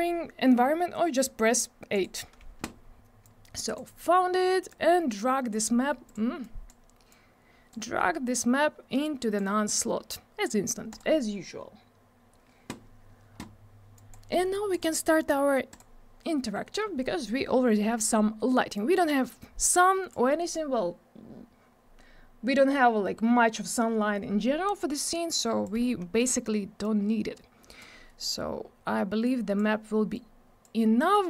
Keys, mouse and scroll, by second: 1.9 click, 3.2 click, 4.7 click, 6.0 click, 6.4 click, 7.1 click, 8.4 click, 11.0 click, 14.0 click, 14.7 click, 15.7 click, 18.7 click, 25.3 click, 26.8 click, 29.2 click, 30.1 click.